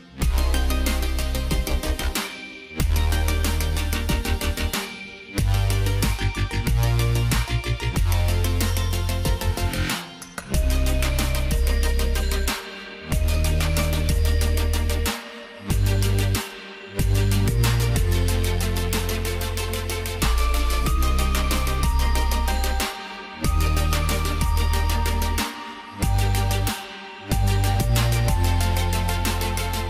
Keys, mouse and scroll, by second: 16.1 click, 18.6 click, 28.8 click.